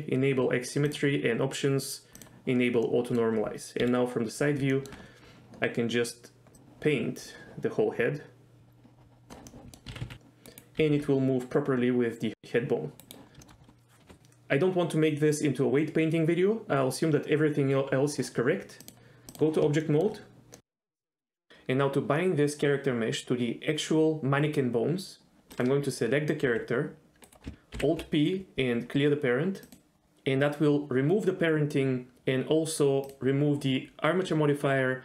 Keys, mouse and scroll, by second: 0.9 click, 3.0 middle click, 3.8 KP_3, 4.7 shift+middle click, 6.5-9.3 drag, 9.5 middle click, 9.9 r, 10.0 r, 10.8 r, 10.9 r, 13.0 right click, 13.4 shift+middle click, 18.8-19.4 drag, 19.8 shift+middle drag, 20.5 middle click, 25.5 click, 26.5 g, 27.3 right click, 27.8 alt+p, 33.1 click.